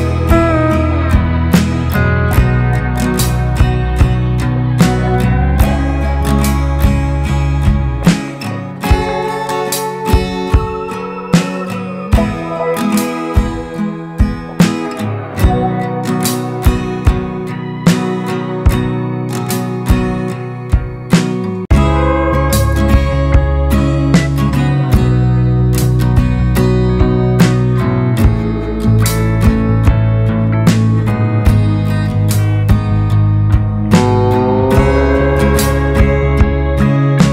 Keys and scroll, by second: 18.6 ctrl+space, 24.4 ctrl+space, 25.3 Delete, 33.9 Delete, 34.8 ctrl+z, 35.1 ctrl+space.